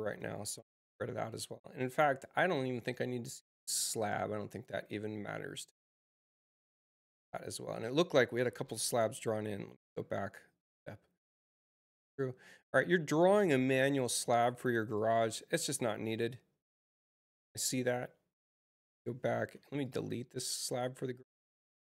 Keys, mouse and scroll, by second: 0.1 space, 4.4 click, 5.5 click, 8.5 ctrl+z, 11.1 click, 13.3 ctrl+z, 14.9 click, 18.5 ctrl+z, 19.3 space, 19.7 click, 20.5 Return, 21.3 Return.